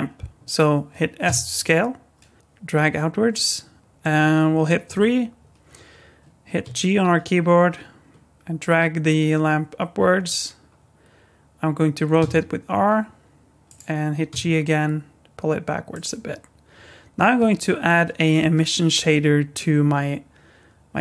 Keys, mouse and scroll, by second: 1.3 s, 3.8 middle click, 4.8 KP_3, 6.6 g, 12.2 r, 14.3 g.